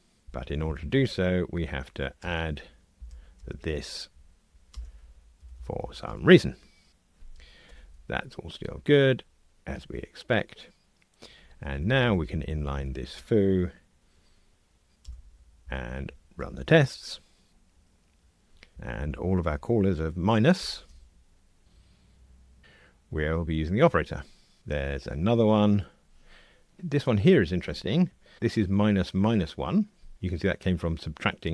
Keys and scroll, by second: 2.2 alt+Return, 4.7 alt+Return, 7.7 ctrl+r, 15.4 alt+super+n, 16.3 ctrl+r, 18.7 Escape, 20.6 ctrl+alt+h.